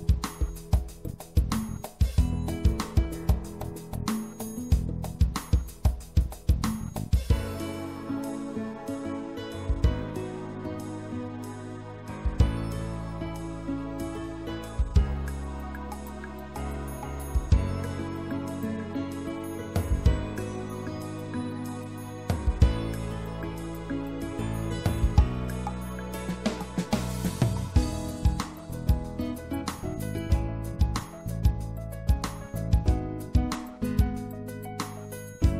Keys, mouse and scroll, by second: 0.5-1.7 drag, 1.7 middle click, 1.7-4.9 drag, 7.9-9.6 drag, 9.6 middle click, 14.5-16.0 drag, 17.9-19.4 middle drag, 21.2-23.5 middle drag, 24.1-27.7 right drag, 26.9-28.7 drag, 30.4-32.3 drag, 32.3 right click, 32.6-33.9 drag, 33.9-35.5 middle drag.